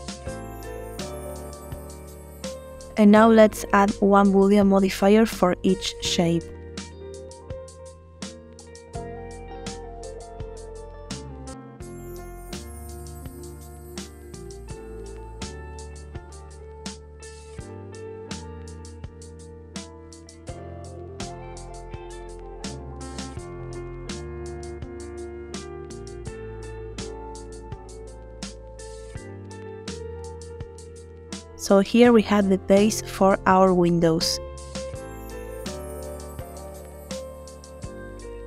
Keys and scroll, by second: 32.2 space.